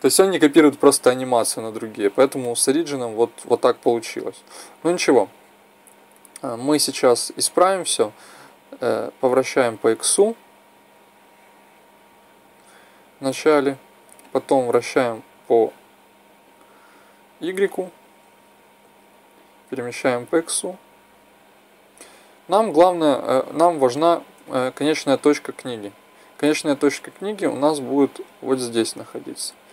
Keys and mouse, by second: 1.3-3.8 middle drag, 4.1-5.4 middle drag, 8.3-11.2 drag, 12.0-12.7 drag, 14.1-17.0 drag, 18.9-20.7 drag, 23.8-25.3 middle drag, 25.3-27.7 drag, 27.9-29.6 drag.